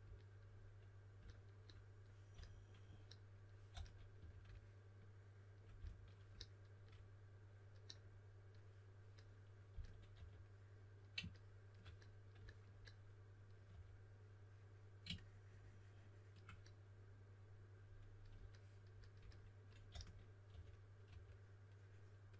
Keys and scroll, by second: 2.3 s, 3.4-4.6 typing, 5.7 s, 9.4-10.6 typing, 13.6 3, 19.8-21.0 typing.